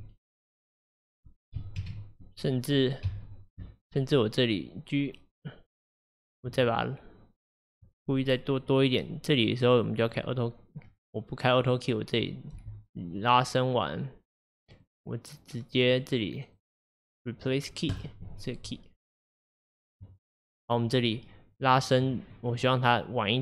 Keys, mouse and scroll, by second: 1.0-1.9 scroll down 1, 1.9 shift+KP_1, 3.1 KP_1, 3.9-4.7 scroll up 3, 10.1 click, 11.7 click, 12.7 g, 15.9 click, 16.6-21.4 right drag, 21.4-23.4 drag.